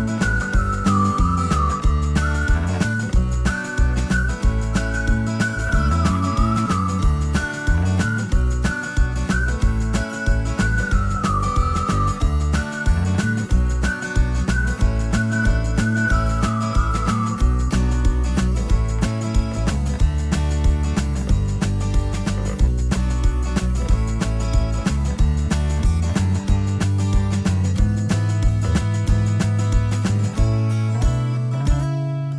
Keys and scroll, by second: 2.6 space, 2.9 Escape, 3.1 Escape, 11.6 alt+q, 17.0 t, 20.7-21.9 typing, 23.9 ctrl+z, 25.7 t.